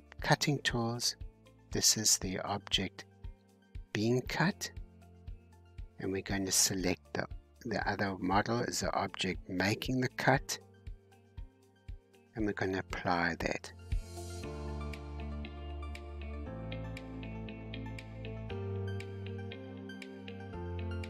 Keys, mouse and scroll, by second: 7.0-8.6 drag, 10.3-13.2 drag, 14.2-18.3 drag, 18.3 g, 19.9 h.